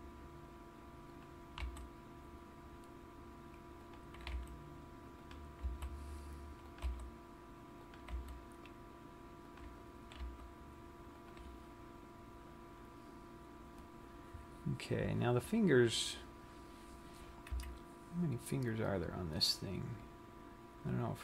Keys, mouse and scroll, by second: 1.8 click, 2.1 g, 4.3 click, 4.7 r, 5.7 click, 6.1 s, 7.3 click, 7.3 g, 8.5 click, 8.8 r, 10.2 click, 10.7 r, 11.9 click, 12.1-13.3 scroll down 1, 13.3-14.0 scroll up 4, 17.8 KP_1.